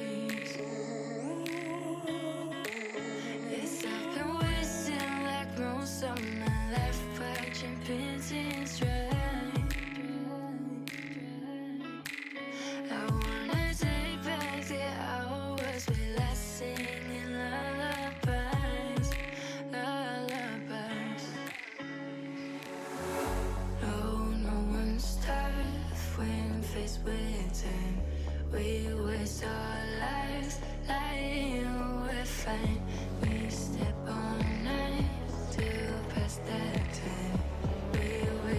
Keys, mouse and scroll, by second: 0.1 g, 1.5-2.7 middle drag, 2.7 s, 3.6 middle click, 4.4 ctrl+z, 4.6 ctrl+z, 4.9 middle click, 5.3 alt+s, 6.9 middle click, 7.8-8.2 scroll up 1, 8.2 g, 10.2-11.3 middle drag, 11.3 click, 11.8 g, 13.5-14.7 middle drag, 14.7 g, 16.3 click, 17.1 alt+z, 17.3 click, 17.7 alt+z, 18.1 g, 19.6-20.5 drag, 19.6 shift+middle click, 19.8 middle click, 20.5 alt+z, 21.1 alt+z, 21.5 g, 22.9-24.0 drag, 22.9 shift+middle click, 23.5 middle click, 24.0 ctrl+r, 26.8-27.6 drag, 26.8 shift+middle click, 27.6 ctrl+r, 28.6 ctrl+z, 29.1 ctrl+r, 29.8 ctrl+b, 33.9-34.4 shift+middle drag, 34.4 alt+z, 34.7 click, 35.1 alt+z, 35.4 g, 36.7 F1, 37.1 alt+click, 37.3 shift+middle click, 37.5 scroll up 1, 37.8 g.